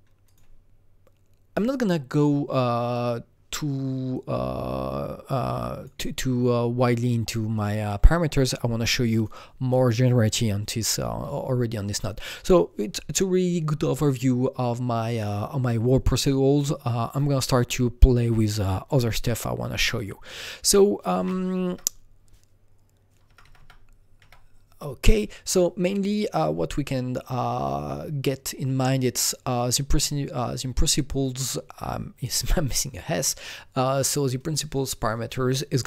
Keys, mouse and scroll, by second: 0.2 click, 4.1-9.1 drag, 9.1-11.7 drag, 19.9 click, 20.6 click, 21.6 Right, 23.2 Right, 23.4 Right.